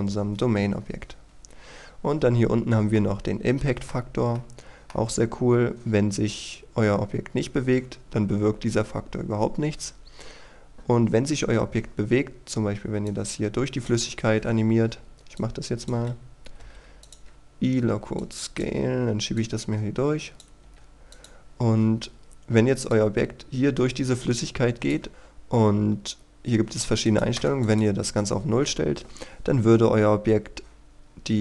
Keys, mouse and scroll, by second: 3.0 middle click, 4.1-4.4 scroll down 1, 4.4 middle click, 13.1 click, 14.1-15.4 scroll down 1, 15.4 click, 16.6 i, 17.1-20.7 drag, 20.7 i, 21.2 click, 21.7-22.5 scroll up 1, 22.9-25.1 drag, 27.4 KP_0, 27.7 click.